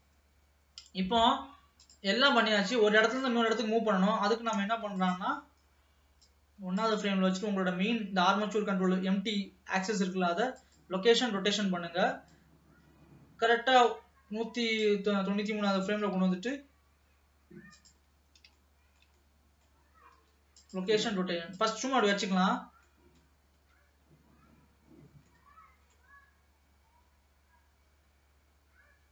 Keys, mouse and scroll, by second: 1.9 click, 3.2 click, 4.8 space, 5.0 click, 6.3-7.5 drag, 7.5-8.5 scroll up 2, 8.5-9.8 middle drag, 12.4-15.2 drag, 15.2-15.6 scroll down 2, 16.1 g, 18.2-18.7 scroll down 2, 18.7-20.2 shift+middle drag, 21.7 click, 22.3-23.6 middle drag, 23.6 space, 25.3-28.3 middle drag.